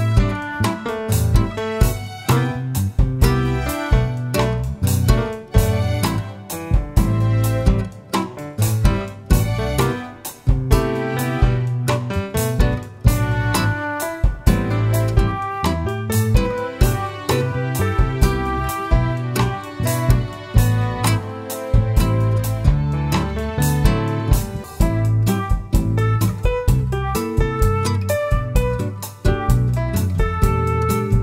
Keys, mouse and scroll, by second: 3.8 KP_Enter, 6.8 KP_Enter, 12.5-17.8 drag, 16.5 /, 17.4-17.8 scroll up 1, 17.8-23.1 shift+middle drag, 18.5 scroll up 1, 20.0-20.4 scroll up 1, 22.1 Tab, 22.8 3, 23.1 click, 23.3-27.3 middle drag, 27.3 shift+click, 27.5-31.2 middle drag.